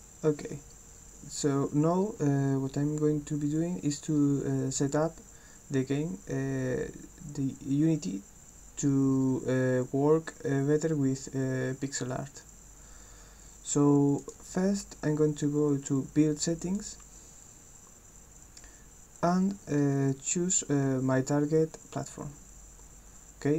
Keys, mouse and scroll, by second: 14.2 click, 16.7 click.